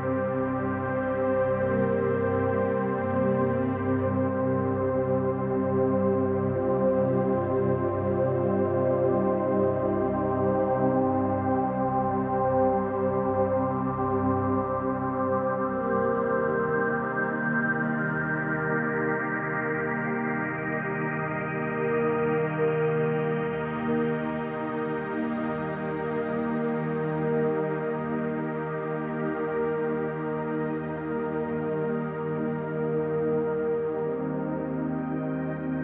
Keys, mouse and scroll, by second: 0.9-1.7 middle drag, 2.3 alt+shift+click, 3.8 alt+shift+click, 5.4 click, 6.7 scroll down 1, 7.8 click, 8.5 alt+shift+click, 9.1 alt+shift+click, 10.6-11.2 drag, 11.6-13.1 scroll down 4, 13.1 scroll down 1, 13.3 alt+z, 13.8 Tab, 14.0-14.5 scroll down 2, 14.5-14.9 middle drag, 15.1-15.9 scroll down 2, 15.9 scroll down 1, 16.0-16.5 shift+middle drag, 17.3-19.1 middle drag, 19.4-19.8 scroll up 1, 19.8-20.8 middle drag, 21.2 click, 21.6 right click, 22.4-23.1 scroll down 3, 23.1-23.9 middle drag, 24.9 click, 26.1 click, 27.1 click, 27.6-28.2 middle drag, 28.4 scroll up 1, 29.1-29.5 scroll down 1, 29.5-29.8 middle drag, 30.1-31.3 middle drag, 32.2 KP_3, 34.0 Tab, 35.0 alt+z.